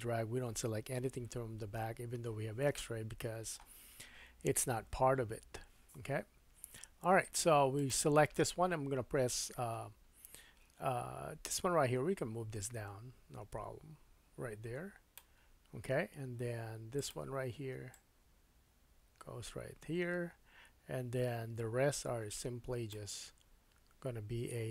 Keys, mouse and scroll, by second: 2.8 shift+middle click, 4.9 1, 5.9-7.7 scroll up 3, 7.9-11.5 middle drag, 11.5-17.1 drag, 17.1 middle click, 17.9-24.7 drag.